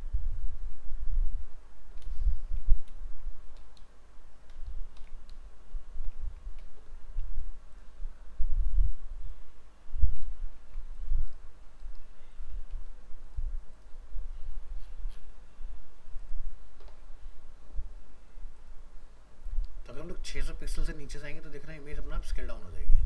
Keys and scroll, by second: 2.3 alt+f, 2.4 alt+移, 5.0 ctrl+shift+End, 6.2 ctrl+c, 10.3 ctrl+v.